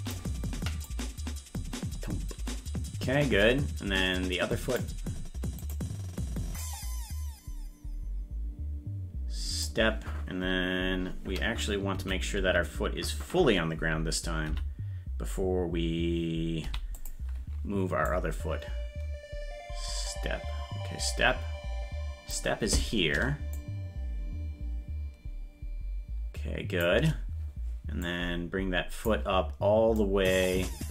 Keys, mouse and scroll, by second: 0.8-4.7 drag, 5.7 right click, 6.6-9.6 drag, 11.9 Right, 14.4 p, 16.6 i, 18.1-22.3 drag, 23.5-26.8 shift+drag, 28.0-29.0 drag, 29.9-30.9 drag.